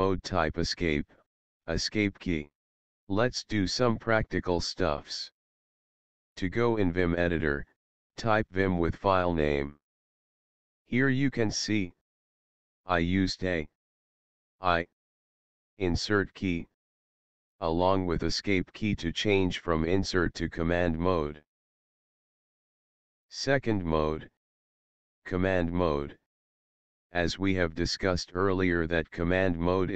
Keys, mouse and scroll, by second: 6.8-10.2 typing, 10.2 Return, 11.7 Escape, 12.8 a, 13.7 Escape, 14.6 i, 15.2 Escape, 16.4 Insert, 16.9 Escape, 21.1 click.